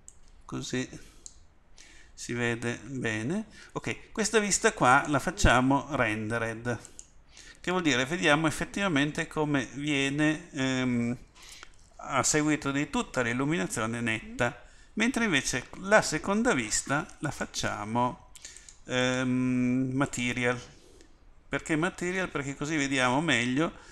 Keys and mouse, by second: 0.4 middle click.